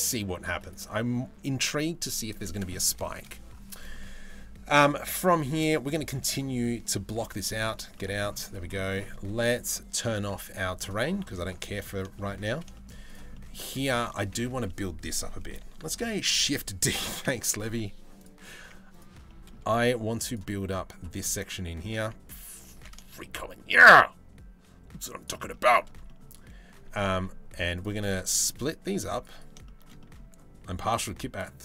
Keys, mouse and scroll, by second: 2.7 shift+middle drag, 3.4 middle click, 4.9 shift+middle drag, 5.7 middle click, 7.4-7.7 shift+middle drag, 8.2 middle click, 10.4 click, 11.4 middle click, 11.8 shift+middle click, 12.4 shift+middle click, 13.0 middle click, 13.3 Tab, 13.5 middle click, 15.6 shift+d, 16.8 p, 18.3 Tab, 18.5 click, 18.9 middle click, 19.9 click, 21.4 Tab, 21.6 a, 22.3 alt+s, 25.1 shift+middle click, 25.7 middle click, 26.8 ctrl+r, 27.8 ctrl+r, 29.3 shift+middle click, 29.6 middle click, 30.6 ctrl+r.